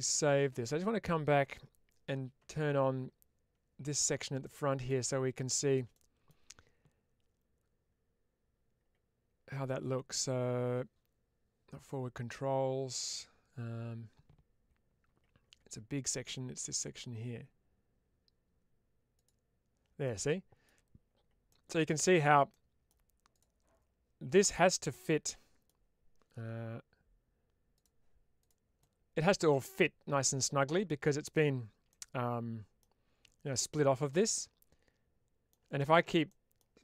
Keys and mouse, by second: 4.3-4.7 middle drag, 5.8 middle click, 19.0 click, 19.9-20.5 middle drag, 21.3-21.7 middle drag, 22.4-22.7 middle drag, 24.9-25.5 middle drag, 27.6 click, 28.3 click, 28.7-31.2 middle drag, 31.7-32.6 middle drag, 34.0-35.3 middle drag, 36.1-36.4 middle drag.